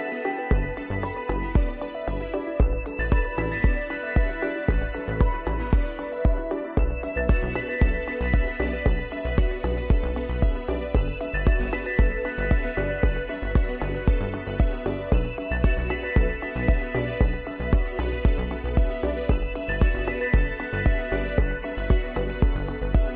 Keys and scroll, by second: 5.6 shift+Right, 18.7 ctrl+shift+g.